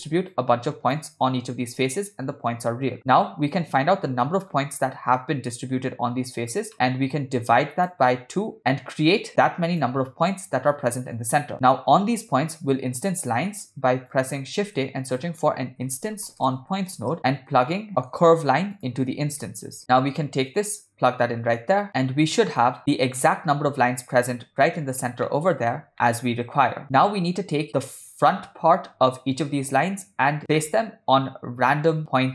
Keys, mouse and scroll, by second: 0.4-1.0 drag, 3.0 middle click, 3.6 click, 3.9 click, 6.7 middle click, 7.2-8.0 drag, 8.6 click, 13.5 middle drag, 14.1 click, 14.6 shift+a, 18.0 middle click, 18.2 shift+a, 20.5-22.7 drag, 24.7 shift+middle click, 25.3 ctrl+middle click, 25.9 shift+middle click, 30.6-31.3 ctrl+middle drag.